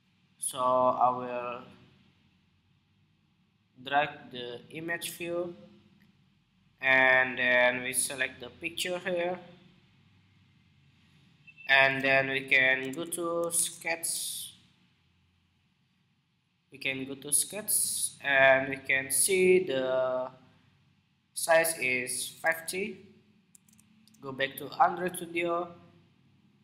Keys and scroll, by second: 12.7 super+Tab, 13.4 super+Tab, 22.1 super+Tab, 23.3 super+Tab.